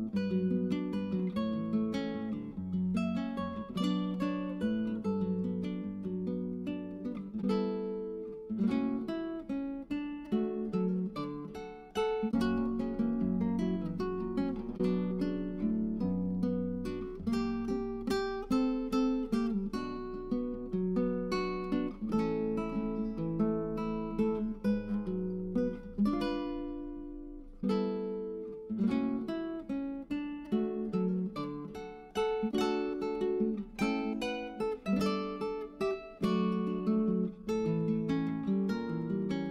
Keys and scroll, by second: 11.2-11.7 typing, 16.0-17.0 typing, 29.4-30.0 typing, 33.7-34.6 typing, 39.4 1.